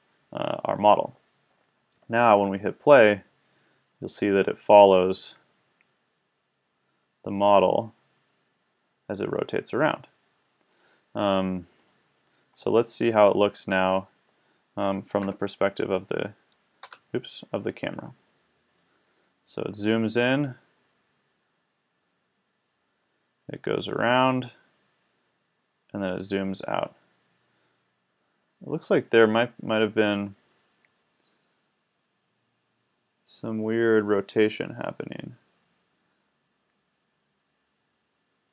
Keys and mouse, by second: 2.9-4.8 drag, 10.8-14.8 drag, 15.2 KP_0, 16.8 KP_0, 18.7-19.7 drag, 26.8-28.2 middle drag.